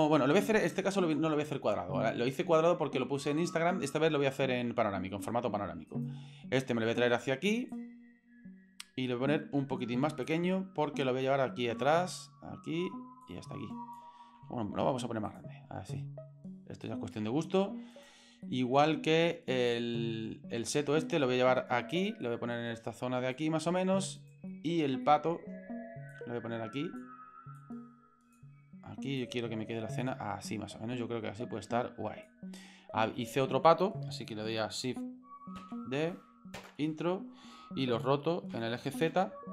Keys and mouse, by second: 0.7 click, 5.9 right click, 6.8-7.1 middle drag, 7.7-8.8 drag, 9.5 s, 11.0-12.2 drag, 13.2 click, 14.4 s, 15.9-17.1 drag, 17.9 right click, 18.5 middle click, 19.7-23.3 drag, 24.2 right click, 24.5-24.9 middle drag, 25.0-25.4 shift+middle drag, 26.1 click, 27.5 click, 29.2-32.3 drag, 32.7 middle click, 35.6 shift+d, 38.5 r.